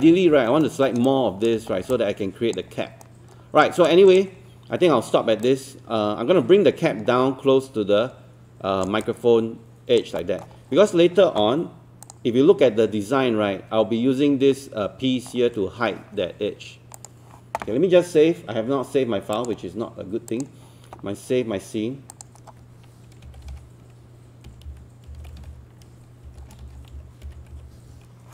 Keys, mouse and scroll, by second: 0.7 alt+middle click, 1.1 alt+click, 1.7 scroll down 1, 1.9 alt+click, 3.1 right click, 3.8-10.0 drag, 10.2 alt+middle click, 10.6 scroll up 1, 12.1 click, 23.5-28.0 typing.